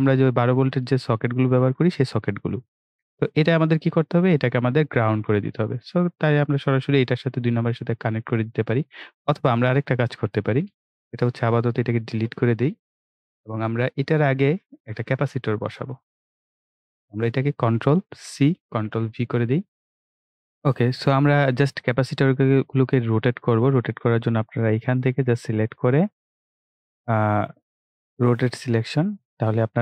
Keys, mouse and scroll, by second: 4.1 click, 9.1 right click, 10.1 click, 12.1 Delete, 13.9 ctrl+scroll down 1, 15.7-17.1 right drag, 17.1 click, 18.2 ctrl+c, 18.7 ctrl+v, 19.8 click, 21.6 click, 24.3-28.3 drag, 28.3-29.8 drag.